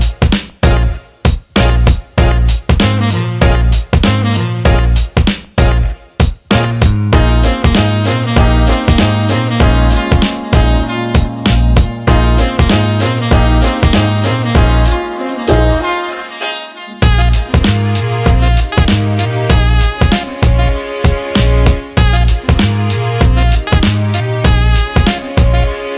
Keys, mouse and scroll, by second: 2.6 alt+middle click, 3.2 alt+middle click, 3.5 alt+shift+middle click, 3.8 alt+middle click, 4.8-5.3 alt+middle drag, 8.9 alt+middle drag, 9.9 shift+a, 13.1 alt+middle drag, 13.4 alt+shift+middle click, 14.0 click, 14.9 click, 15.3 alt+middle click, 16.3-17.6 drag, 18.4 alt+shift+middle click, 19.1 alt+middle click, 20.0 Tab, 21.9 click, 22.8 alt+shift+middle click, 23.5-25.4 drag.